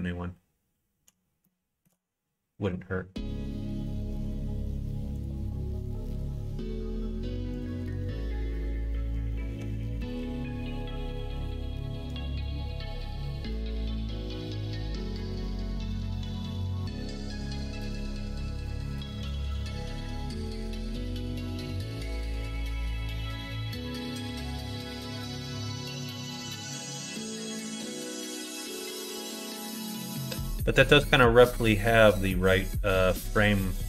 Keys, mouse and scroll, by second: 1.4 shift+middle click, 11.2 click, 12.0 g, 18.7 ctrl+right click, 20.5 s, 23.5 middle click, 24.5 alt+z, 25.0-31.0 middle drag, 31.0 middle click, 31.1-32.1 drag, 32.4 click, 33.0 right click, 33.3 middle click.